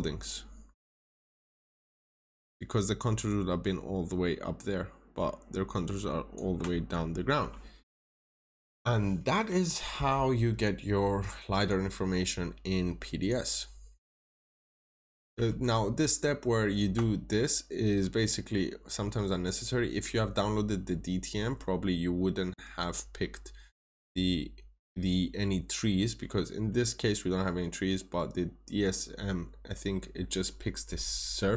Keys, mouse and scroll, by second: 1.2 scroll down 1, 1.8 ctrl+shift+click, 6.6 scroll up 1, 8.2 click, 10.1-10.5 scroll up 1, 11.5 click, 11.9 scroll up 1, 13.1 click, 13.4 right click, 13.9 scroll down 1, 14.5 middle click, 14.8-15.6 scroll down 2, 15.6 ctrl+shift+click, 17.0-17.9 scroll up 1, 18.3 scroll down 1, 18.6 middle click, 21.6 scroll down 1, 23.8-25.9 scroll up 1, 25.9 scroll down 1, 26.1 middle click, 27.6-31.5 scroll up 1.